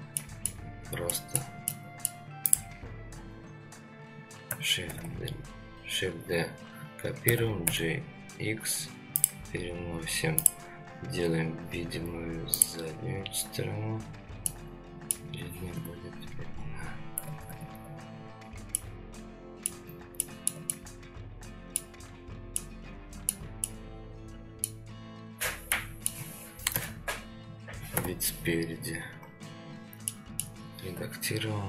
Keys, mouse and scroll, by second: 0.2 middle drag, 0.8-1.4 scroll down 2, 1.1 middle drag, 1.7-2.1 middle drag, 2.5 click, 3.1 scroll up 2, 3.9-4.5 scroll up 1, 4.9 shift+d, 10.4 click, 12.6 click, 14.1-14.5 scroll down 2, 14.5-15.1 middle drag, 15.7 KP_3, 16.5 scroll up 2, 17.5 KP_3, 18.3-18.7 scroll down 2, 18.7-19.7 middle drag, 19.9 scroll down 2, 20.2-20.5 shift+middle drag, 20.7-21.8 middle drag, 22.0-22.6 scroll up 2, 22.6-23.3 middle drag, 23.6-24.7 middle drag, 25.7 middle click, 26.7 KP_3, 27.9 KP_1, 28.9-29.8 scroll up 5, 30.1-30.4 shift+middle drag.